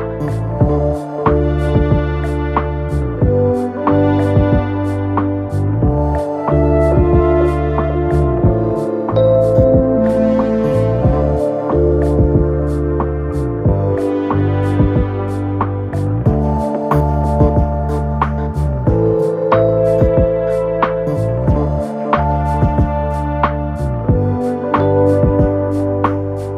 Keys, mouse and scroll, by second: 3.2 double click.